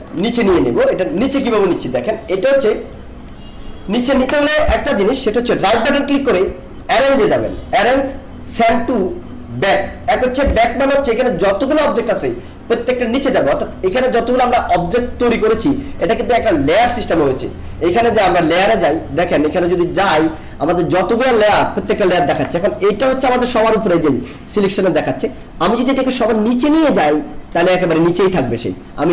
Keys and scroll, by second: 0.4 ctrl+shift+[, 1.2 ctrl+z.